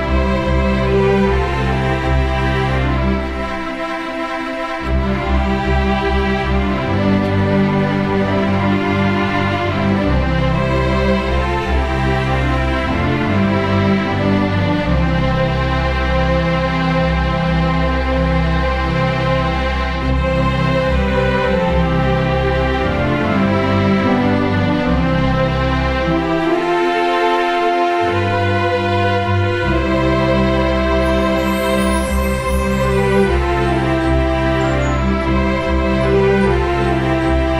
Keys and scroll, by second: 0.2 ctrl+d, 0.6 1, 1.0 space, 2.2 space, 16.7 Delete, 17.0 ctrl+d, 17.2 space, 26.0 Delete, 26.3 ctrl+d, 32.2 Delete, 32.5 ctrl+d, 32.7 space.